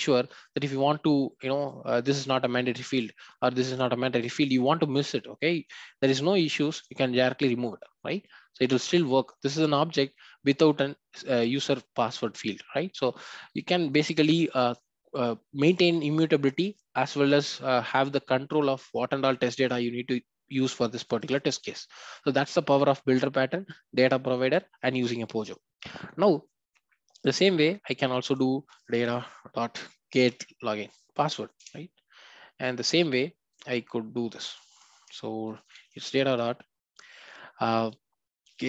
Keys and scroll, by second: 6.5 ctrl+y, 14.6 ctrl+z, 31.7 Return.